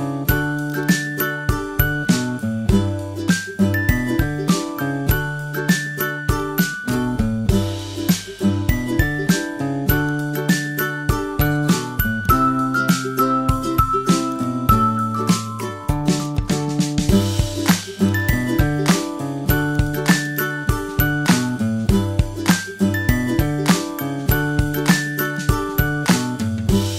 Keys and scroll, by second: 11.4 super+t.